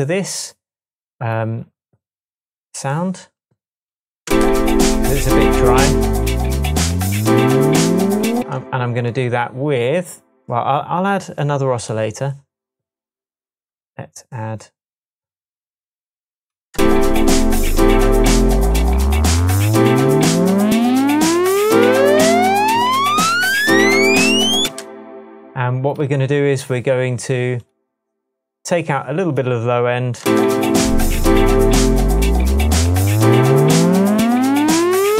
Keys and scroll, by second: 4.2 space, 8.4 space, 16.7 space, 24.6 space, 30.2 space.